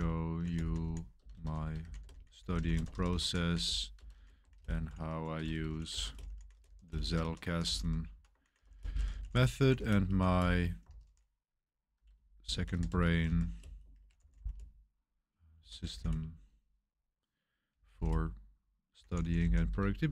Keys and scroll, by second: 0.0-16.4 typing, 17.5-20.1 typing.